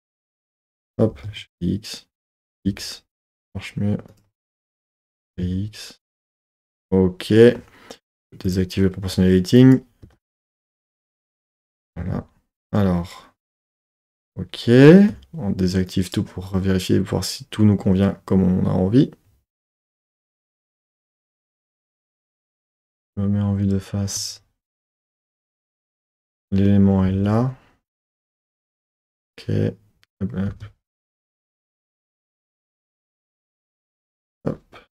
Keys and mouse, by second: 0.8 click, 1.1 g, 1.2 z, 2.5 x, 4.1 click, 5.1 g, 5.3 x, 6.7 click, 8.4 click, 9.6 click, 10.0 g, 10.2 g, 11.0 click, 11.9 z, 13.4 middle click, 15.9 click, 21.3 Tab, 22.2 KP_1, 22.3 KP_1, 23.6 click, 24.1 z, 25.3 z, 31.3 Tab, 34.3 click.